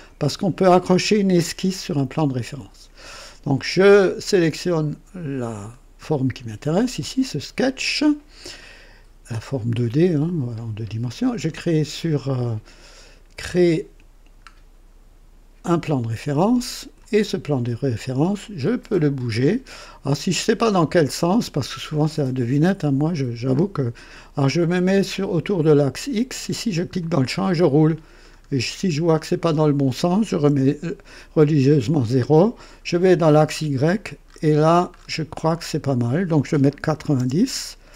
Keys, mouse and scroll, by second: 5.6 click, 13.4 click, 14.5-15.2 scroll down 2, 15.8-17.1 drag, 18.6-19.3 drag, 26.7 click, 27.3-29.0 scroll down 6, 29.3 scroll up 2, 30.4 KP_0, 32.9 click, 33.4-35.9 scroll down 7, 36.8 KP_9, 37.1 KP_0.